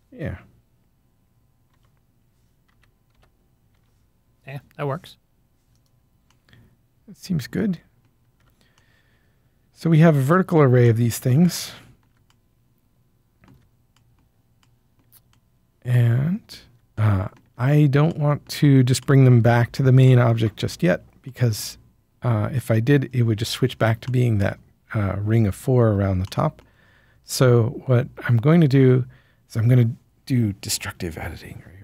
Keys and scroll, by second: 1.7 Tab, 2.4-3.7 typing, 8.3 Tab.